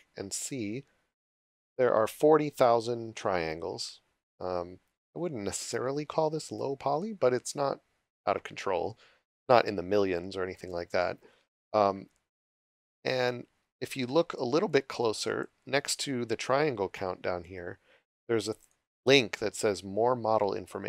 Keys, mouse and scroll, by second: 6.7-7.3 scroll up 1, 8.8 click, 12.8 click, 14.6 shift+click, 18.6 click.